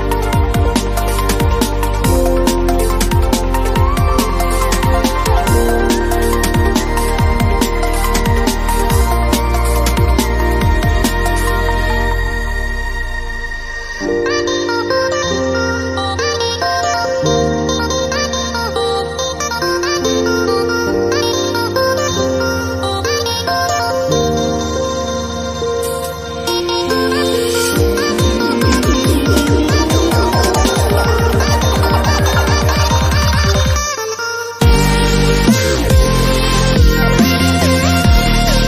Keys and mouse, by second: 0.1 b, 0.3 z, 0.5 b, 1.2 a, 2.3 click, 2.8 click, 3.2 a, 3.3 a, 3.4 Tab, 3.5 z, 4.5 Tab, 5.0 middle click, 5.6 z, 6.1 middle click, 6.4 ctrl+l, 7.1 s, 8.1 click, 8.7 s, 9.3 click, 10.3 middle click, 11.4-15.2 typing, 14.9 click, 15.3 click, 16.0 click, 16.2 ctrl+z, 16.4-18.5 typing, 16.7 click, 17.5 click, 18.2 click, 18.7 click, 19.9 middle click, 20.3 ctrl+l, 21.1 shift+d, 21.6 r, 22.5 g, 23.5 click, 24.9 z, 25.1 click, 25.7 click, 26.3 z, 26.9 a, 27.1 b, 27.5 a, 27.6 click, 27.8 click, 28.1 click, 28.7 click, 29.2-30.0 typing, 30.7 middle click, 31.7 ctrl+Tab, 32.2 z, 32.6 middle click, 32.9 x, 33.8 click, 33.9 x, 35.6 middle click, 36.1 a, 36.9 a, 38.1 shift+a.